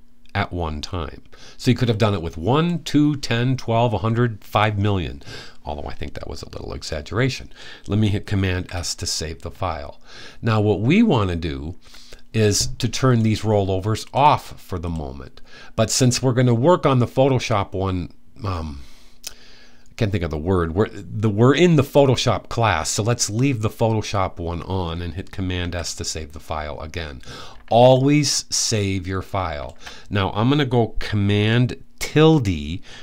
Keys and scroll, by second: 8.2 super+s, 25.3 super+s.